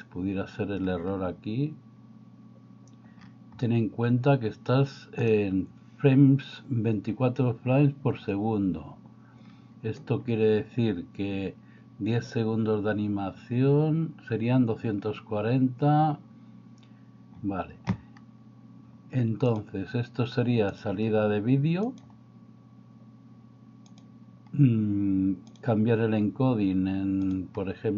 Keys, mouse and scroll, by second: 5.4 click, 19.6-20.9 drag, 21.9-24.1 drag, 27.3 drag.